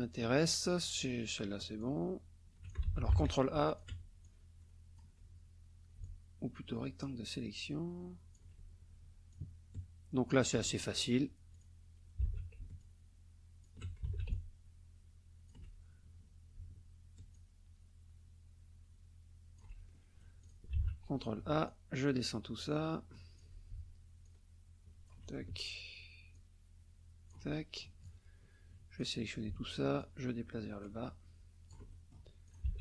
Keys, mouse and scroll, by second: 1.8 alt+click, 2.9 ctrl+alt+z, 3.1 ctrl+alt+a, 3.7 ctrl+alt+click, 4.2 alt+click, 6.0-8.5 alt+drag, 9.3-11.0 alt+drag, 11.5 click, 12.6 ctrl+alt+a, 12.8 ctrl+alt+click, 14.3 ctrl+alt+a, 14.3-15.7 ctrl+alt+drag, 17.3-19.8 alt+drag, 20.8 ctrl+a, 21.7-23.6 alt+drag, 24.2 alt+click, 26.3-27.5 alt+drag, 27.6 alt+click, 28.3 click, 30.0 alt+click, 30.9-31.3 alt+scroll down 1, 31.9 alt+click, 32.5 ctrl+alt+click, 32.7 ctrl+alt+a.